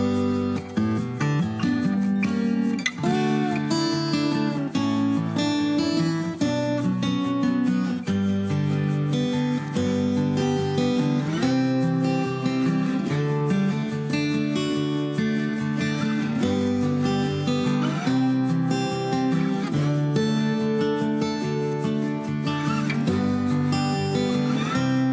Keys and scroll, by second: 16.9-17.7 typing.